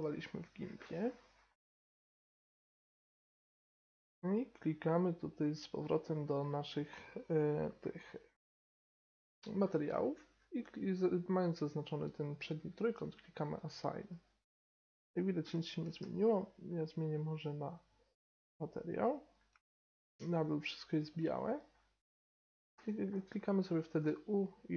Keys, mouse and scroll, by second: 0.0-1.7 drag, 1.7-2.7 middle drag, 5.7 click, 13.4-14.7 drag, 14.7 middle click, 16.0 z, 16.9-18.3 middle drag, 19.0 middle click, 19.7-20.7 middle drag, 22.5 middle click, 22.7 u, 23.4 middle click, 23.8 u.